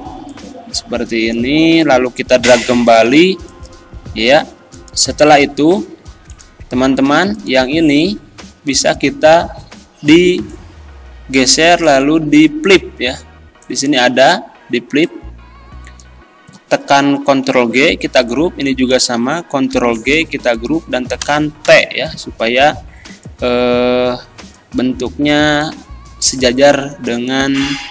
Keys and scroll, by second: 17.4 ctrl+g, 19.9 ctrl+g, 21.7 t.